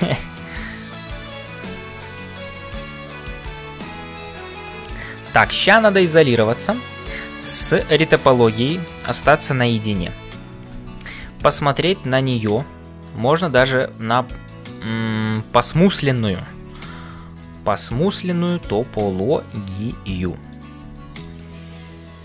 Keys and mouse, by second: 0.0-22.2 typing, 0.7 click, 2.6 KP_Divide, 4.4 shift+middle click, 4.8 click, 7.6 click, 10.0 KP_Divide, 10.9 ctrl+s, 11.8 right click, 13.1-14.6 middle drag, 15.8 middle click, 16.6 Tab, 17.1 shift+click, 17.3 shift+middle click, 17.6 middle click, 18.9 shift+middle click, 19.4-20.7 middle drag, 20.9 middle click.